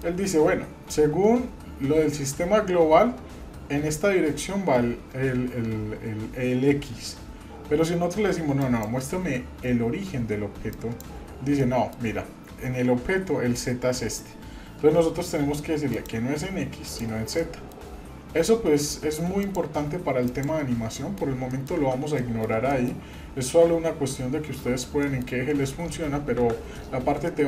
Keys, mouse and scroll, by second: 8.6-11.4 drag, 11.5-11.9 middle drag, 15.9 click, 16.9 click, 17.4 middle click, 19.4-20.6 drag, 20.9 middle drag, 21.5 shift+middle click, 22.2-22.5 middle drag, 22.7 shift+middle drag, 24.5 middle click, 25.0 middle drag, 26.3 KP_Divide, 26.9 scroll down 1, 27.3-27.4 middle drag.